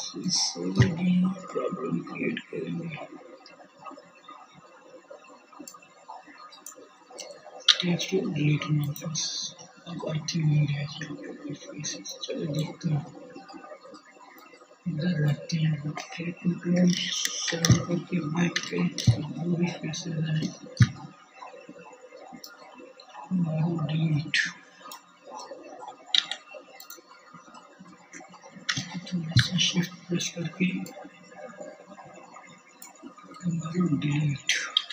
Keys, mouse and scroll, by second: 5.3 x, 8.0-12.6 drag, 12.6-14.4 middle drag, 15.1 ctrl+KP_7, 15.2-18.0 ctrl+middle drag, 18.2 shift+middle click, 18.6 middle click, 23.8 x, 26.4 shift+middle click, 32.4 x, 34.5-34.9 drag.